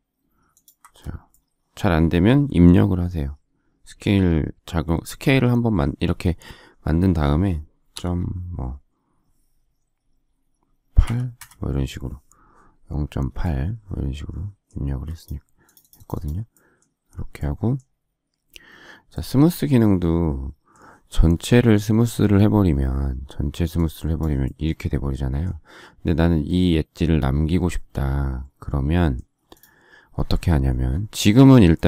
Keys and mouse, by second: 11.0 8, 11.3 Return, 14.7 space, 15.2 click.